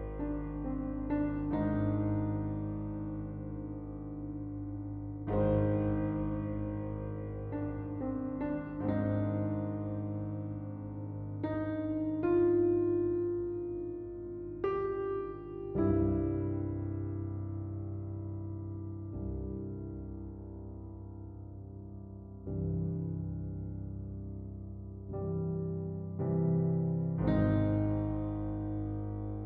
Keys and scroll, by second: 2.1 Return.